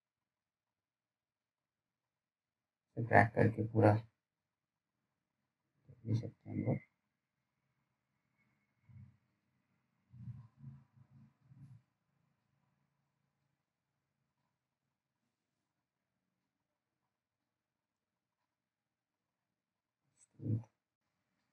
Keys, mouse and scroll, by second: 10.0-10.6 scroll up 1, 10.6 click, 19.8-21.5 scroll up 1.